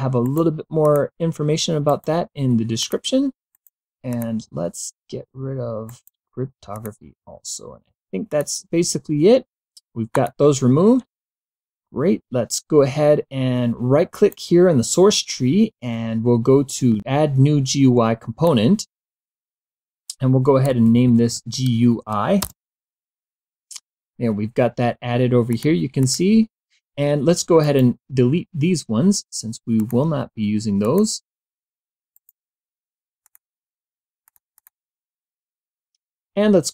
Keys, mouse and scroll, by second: 0.3 right click, 0.9 click, 1.9 right click, 2.8 click, 3.6 right click, 4.1 click, 5.9 right click, 6.8 click, 8.3 click, 10.2 click, 14.2 right click, 17.2-19.0 drag, 20.6-21.6 typing, 22.4 Return, 25.6 click, 26.1 click, 27.7 right click, 29.9 click, 31.0 click, 32.3 right click, 33.4 click, 34.4 click.